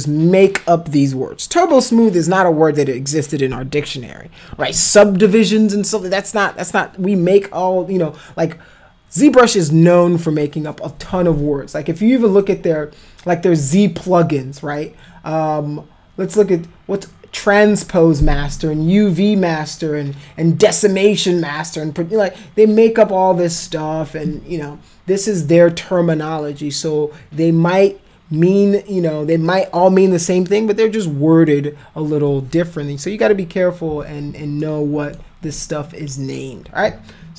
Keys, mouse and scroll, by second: 12.4 click, 34.6 alt+middle click.